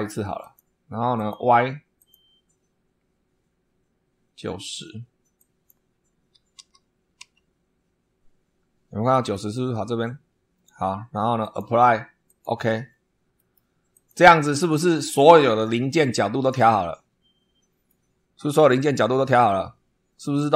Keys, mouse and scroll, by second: 0.3 click, 1.1 click, 1.9 click, 5.3 click, 6.5 9, 7.1 0, 8.4-9.0 scroll up 4, 11.3 click, 12.2 click, 12.8 scroll down 2, 13.3 middle click, 13.8 click, 14.3-14.8 scroll down 2, 15.3 scroll up 2, 17.8-20.3 drag.